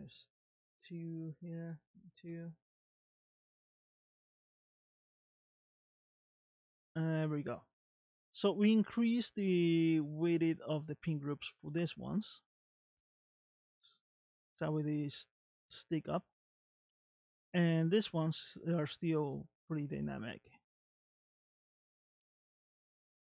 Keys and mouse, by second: 3.2 space, 12.8 middle click, 19.3-23.2 middle drag.